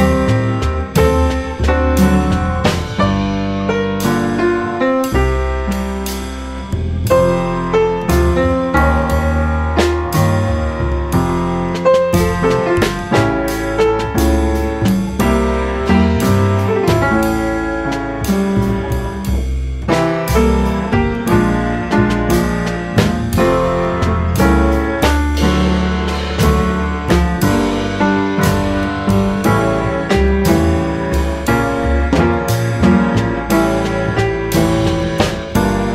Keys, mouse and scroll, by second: 0.4 g, 2.1-2.4 middle drag, 2.4 scroll up 1, 2.4-2.9 middle drag, 2.9 Tab, 3.5 click, 3.6 click, 4.7 g, 6.1 s, 7.4 click, 7.6 Tab, 7.9 click, 8.1-8.5 scroll down 4, 8.5 middle click, 8.8 scroll up 2, 9.0 middle click, 9.2 click, 9.4 right click, 9.8 middle drag, 10.1-10.4 scroll up 3, 10.4 click, 10.6-11.0 middle drag, 11.0 click, 11.9 g, 13.6 g, 16.4 s, 18.8 g, 19.9 click, 20.1-21.4 middle drag, 21.4 click, 21.6-22.7 middle drag, 22.7-24.1 drag, 24.1 middle click, 24.3 Tab, 24.5 middle click, 24.7 Tab, 24.9 click, 25.1 middle click, 25.9 scroll down 1, 26.0-26.6 middle drag, 26.6 click, 27.0-27.8 middle drag, 27.8 s, 28.5 click, 28.7 middle drag, 29.0 click, 29.2 Tab, 29.6 click, 29.7 click, 30.3 s, 32.2 click, 32.4 scroll down 2, 32.6 middle click, 32.8 Tab, 33.2-33.5 middle drag, 33.5 scroll up 2, 33.7 middle drag, 34.0 Tab, 34.4 click, 34.6-35.7 drag.